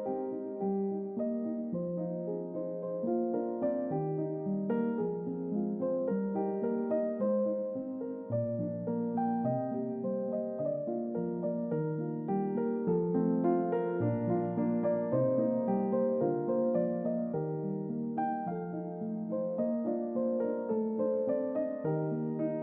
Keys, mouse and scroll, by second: 0.9 click, 1.4 double click, 3.1 click, 3.5 double click, 4.1 double click, 4.5 click, 4.8 double click, 5.7 middle click, 8.4 click, 8.7 double click, 10.3 click, 11.7 click, 12.8 click, 13.4 click, 15.6-16.6 scroll up 4, 18.3-20.3 middle drag, 21.2 click.